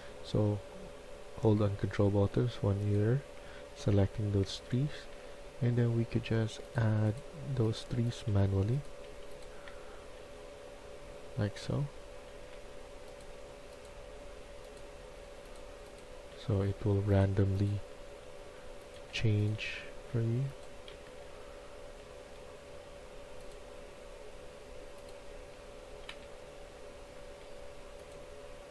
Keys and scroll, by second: 3.7-5.1 typing, 8.2-12.7 typing, 14.9 a, 16.2 s, 17.9-19.5 typing, 20.8 typing, 25.3-26.1 typing.